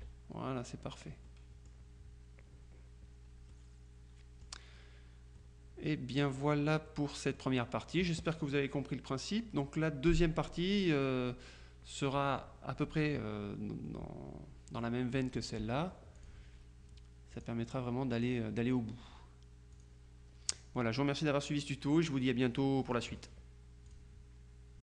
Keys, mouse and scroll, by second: 0.0 KP_Subtract, 1.3-2.3 middle drag, 3.6-5.0 drag, 5.5 click, 6.1-7.9 middle drag, 14.8 click, 16.2 click, 17.4 click, 18.2 click, 19.8 click, 20.6 click, 24.0 click, 24.9 click.